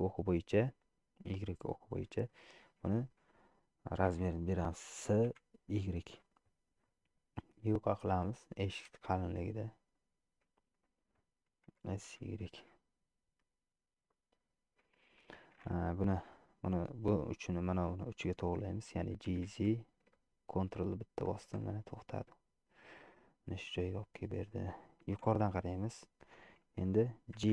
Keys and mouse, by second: 2.3 shift+middle click, 3.0 shift+middle click, 4.2 s, 9.5 middle click, 10.7 shift+middle click, 11.7 s, 14.1-15.4 middle drag, 19.4 g, 22.0-23.4 drag, 24.0 click, 25.2 KP_7.